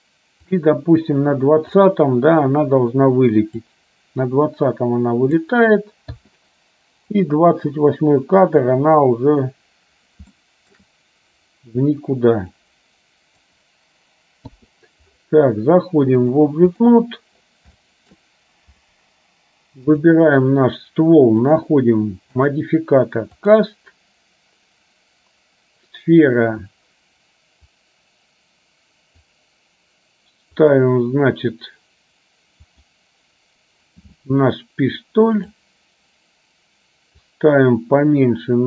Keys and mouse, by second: 0.7-1.9 drag, 3.8-5.5 drag, 7.3-8.8 drag, 10.4 shift+middle click, 12.8 click, 16.3 click, 17.9 shift+middle click, 20.0 click, 21.7 click, 22.5-23.7 drag, 27.9-29.3 drag, 30.8 click, 35.5 click, 37.5-38.6 drag.